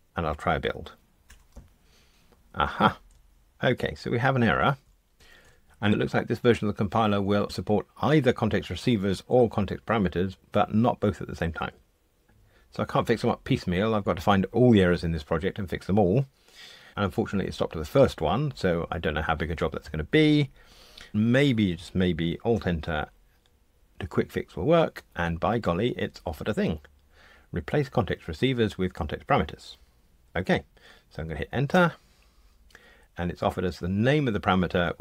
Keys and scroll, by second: 1.3 super+F9, 22.5 alt+Return.